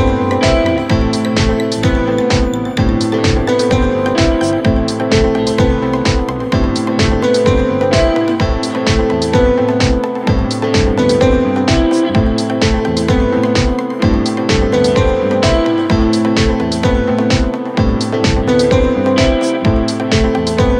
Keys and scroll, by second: 3.3 g.